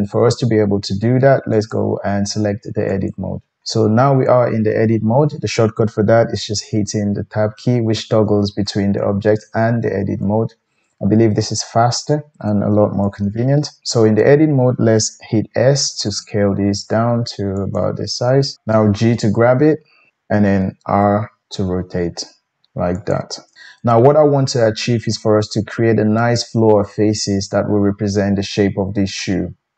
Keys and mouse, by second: 1.6-5.8 drag, 6.5 Tab, 7.1 Tab, 7.5 Tab, 7.9 Tab, 8.3 Tab, 8.6 Tab, 9.0 Tab, 9.4 Tab, 9.8 Tab, 10.2 Tab, 12.0-17.8 drag, 15.6 s, 17.8 middle click, 18.6 KP_1, 18.7 g, 20.8 r, 25.1-29.7 middle drag.